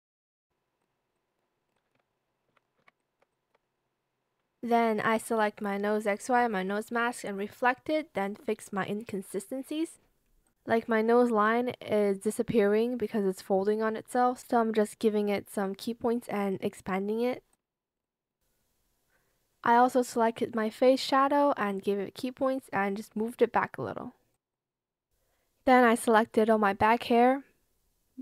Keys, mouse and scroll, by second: 1.1 shift+click, 1.9 Escape, 2.6 ctrl+z, 2.9 shift+click, 5.1 ctrl+click, 5.6 ctrl+click, 5.7 ctrl+click, 6.6 Return, 6.9 Escape, 14.2 ctrl+z, 22.4 ctrl+z, 23.1 ctrl+shift+z, 23.7 Return, 27.1 shift+click.